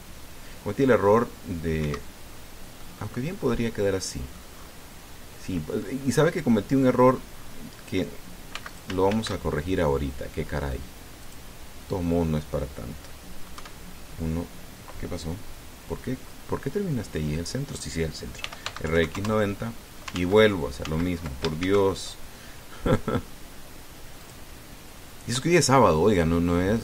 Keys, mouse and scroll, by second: 2.6 Escape, 3.1 scroll down 1, 3.6-5.3 drag, 6.6-7.9 drag, 7.9 scroll up 1, 8.1-8.8 scroll down 2, 9.3 x, 9.5 shift+click, 9.9 shift+a, 12.0 click, 14.3 KP_1, 19.2 r, 19.4 x, 19.6 KP_9, 19.8 KP_0, 19.9 KP_Enter, 20.9 ctrl+z, 22.2 ctrl+shift+z, 22.4 ctrl+shift+a, 25.0 click.